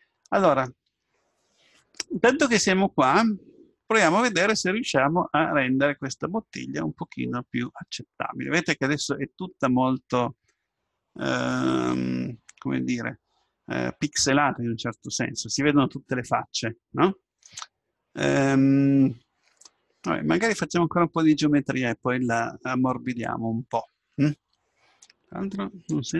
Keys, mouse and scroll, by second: 2.7-4.3 middle drag, 6.0-7.9 middle drag, 18.2-20.1 middle drag.